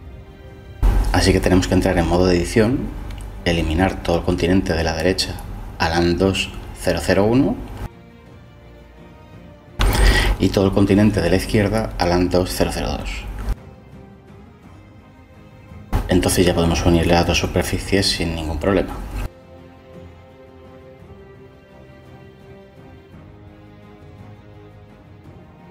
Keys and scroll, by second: 0.0 Delete, 10.5 Delete, 18.0 Delete, 19.7 Tab, 25.5 Tab.